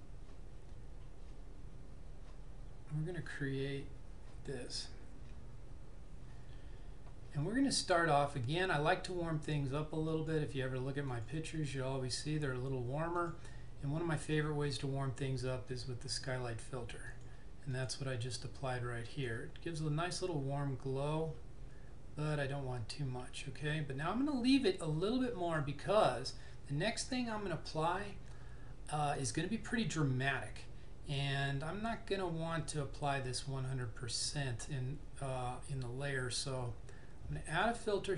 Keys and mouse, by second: 10.2 click, 15.7 click, 37.5 click.